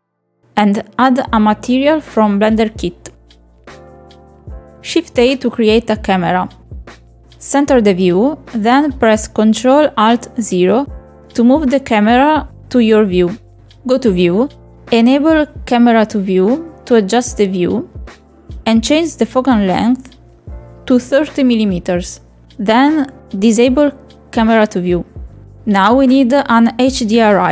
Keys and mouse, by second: 0.0 middle click, 0.7 click, 1.3 middle click, 2.0 click, 4.9 click, 5.2 click, 6.7 shift+middle click, 7.3 shift+a, 9.4 middle click, 10.2 middle click, 10.7 shift+middle click, 13.8 click, 14.2 click, 14.5 shift+middle click, 15.1-15.8 ctrl+middle drag, 16.6 ctrl+middle click, 17.1 ctrl+shift+middle click, 17.8 shift+middle click, 18.6 click, 19.7 click, 21.1 click, 22.2-25.6 ctrl+shift+middle drag, 26.4 click.